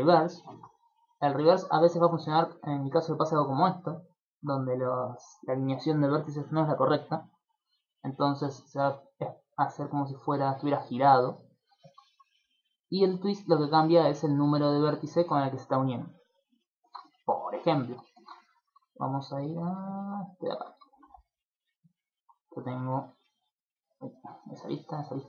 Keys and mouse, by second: 0.4 middle click, 1.0 click, 1.8 click, 3.0 middle click, 4.2 middle click, 12.8 click, 13.3 click, 13.7 click, 14.0 click, 14.3 click, 14.7 click, 15.1 click, 16.5 middle click, 16.8 ctrl+middle click, 17.1 shift+middle click, 17.5 ctrl+middle click, 17.9 shift+middle click, 18.1 ctrl+middle click, 18.6 Tab, 18.9 shift+middle click, 19.9 shift+middle click, 20.3 right click, 20.5 Tab, 20.9 shift+middle click, 21.1 middle click, 21.7 middle click, 22.2 alt+shift+right click, 22.9 alt+right click, 23.4 alt+right click, 23.8 alt+right click, 24.5 alt+shift+right click, 24.9 alt+shift+right click.